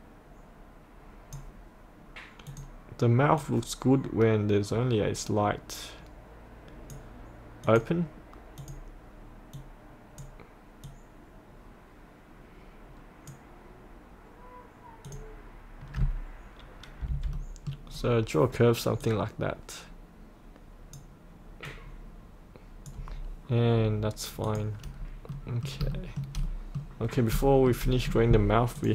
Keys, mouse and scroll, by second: 17.0 F8, 17.4 middle click, 17.9-19.0 scroll down 1, 19.0-23.1 drag, 23.1-23.6 scroll up 1, 24.5 click, 25.0-25.3 scroll up 1, 25.3 middle click, 26.0 shift+middle click, 26.5 middle click, 27.1 scroll down 1, 27.5 shift+middle click, 28.8 click.